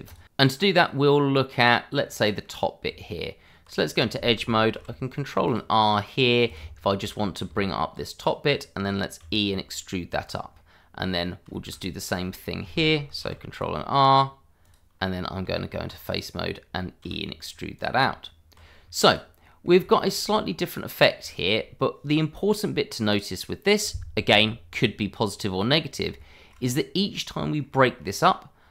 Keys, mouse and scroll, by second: 0.9 middle click, 2.9 Tab, 4.7 ctrl+r, 5.4 click, 7.0 shift+middle click, 7.0 middle click, 7.2 shift+middle click, 7.4 Tab, 8.2 click, 8.5 middle click, 9.2 e, 10.2 click, 10.6 middle click, 13.2 ctrl+r, 13.5 click, 14.9-15.4 scroll up 1, 15.4 Tab, 16.0 click, 16.4 middle click, 17.0 e, 17.7 click, 18.0 Tab, 18.7-19.0 scroll down 1, 19.0 click, 19.4 middle click, 20.0 shift+middle click, 20.4 middle click, 21.4 shift+middle click, 21.6-23.0 scroll up 1, 23.0 middle click, 25.8-26.1 scroll up 1, 26.2 shift+middle click, 26.5-26.9 scroll up 1, 27.0 middle click, 28.1-28.7 scroll up 1.